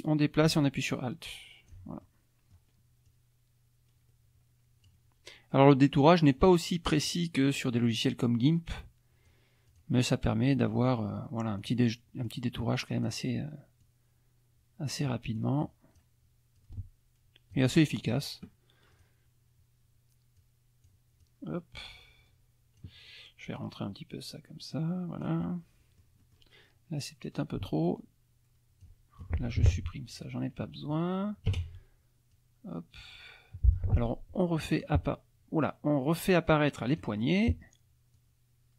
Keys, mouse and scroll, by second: 2.0 alt+click, 3.1-5.1 drag, 6.3-9.5 drag, 9.7-11.1 drag, 10.0-11.1 right drag, 11.6 click, 12.3 click, 13.8-15.2 drag, 15.4 click, 16.6-17.7 drag, 17.9 alt+click, 18.9 click, 20.4 click, 21.2-23.0 drag, 23.6-26.5 drag, 25.4 right click, 27.2-29.0 drag, 29.2-30.4 alt+drag, 31.5 Delete, 32.3-33.3 drag, 34.7 click, 36.3-37.5 drag, 37.2 middle click, 38.1 click.